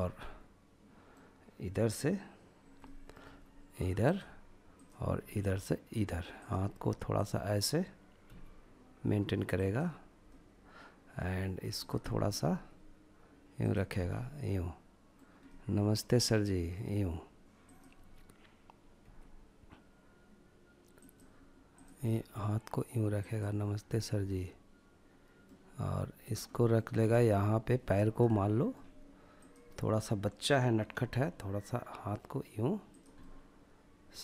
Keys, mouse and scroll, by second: 1.8 middle click, 2.2 r, 3.0-4.2 drag, 4.2 r, 5.3 click, 6.1 click, 7.2 g, 8.5 click, 9.2-10.2 middle drag, 10.7 drag, 11.0-11.5 middle drag, 11.5 g, 12.6 click, 12.8 scroll down 1, 13.1-15.9 middle drag, 16.6 click, 18.0 g, 20.0 click, 20.7 click, 21.0 g, 22.2 click, 22.8-23.1 scroll down 1, 23.2-25.2 middle drag, 25.5-25.9 middle drag, 25.9 scroll up 1, 26.2-28.3 middle drag, 28.3 click, 29.9 g, 31.9 click, 32.1-34.2 middle drag.